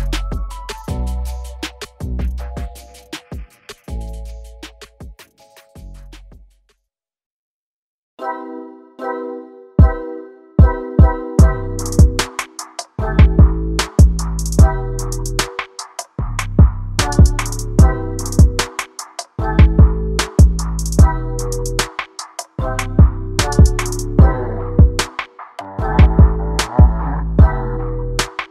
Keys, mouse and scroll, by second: 2.5-3.1 scroll down 3, 2.7 shift+middle click, 3.1 scroll up 2, 3.3 middle click, 4.0 KP_0, 4.4-5.4 scroll up 9, 4.8 shift+middle click, 5.4-5.9 scroll down 11, 6.2 shift+middle click, 6.7 /, 7.3-7.8 scroll down 9, 7.8 KP_0, 8.3 scroll down 1, 8.5-8.9 scroll up 1, 9.7 z, 17.4 click, 17.7 click, 18.2 click, 19.1 click, 19.7 click, 21.0-22.0 drag, 22.7 alt+a, 23.0 scroll down 1, 23.2 shift+middle click, 23.6-23.9 scroll up 1, 25.5 z, 25.6 middle click, 25.9-27.0 scroll up 10, 26.2 shift+middle click, 26.4 alt+z, 27.0 click, 27.2 click, 27.5 click, 27.9-28.2 scroll down 7, 28.2 middle click.